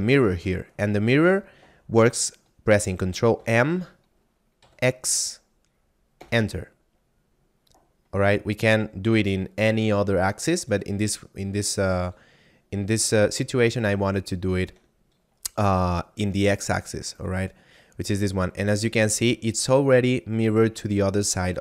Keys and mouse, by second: 3.1 ctrl+m, 4.6 x, 6.1 Return, 12.2 shift+middle click, 13.8 shift+middle click, 16.2 shift+middle click, 18.1 shift+middle click, 21.0 shift+middle click.